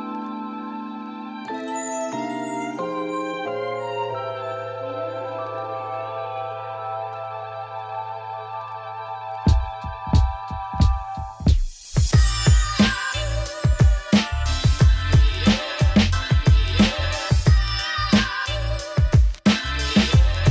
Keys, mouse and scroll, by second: 1.3-8.7 drag, 8.7-9.0 scroll down 3, 9.0 middle click, 9.4 click, 9.7 middle click, 10.0 shift+click, 10.7 ctrl+l, 12.5-15.2 drag, 15.2 middle click, 15.8 scroll down 1, 16.0-17.2 middle drag, 17.2-20.1 drag, 20.4 middle click.